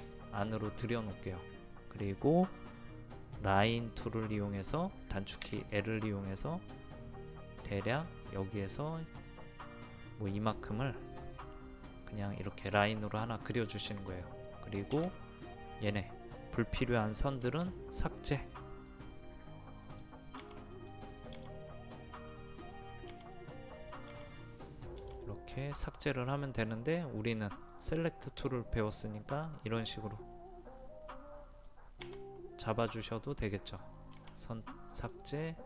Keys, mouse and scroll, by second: 7.8 click, 15.2 space, 15.8 click, 17.4 Delete, 19.8 click, 20.4 Delete, 20.7 click, 21.3 Delete, 23.1 Delete, 23.7 click, 24.1 Delete, 25.0 Delete, 25.6-32.0 drag, 32.0 Delete, 33.6 click, 34.1 Delete, 34.9 click.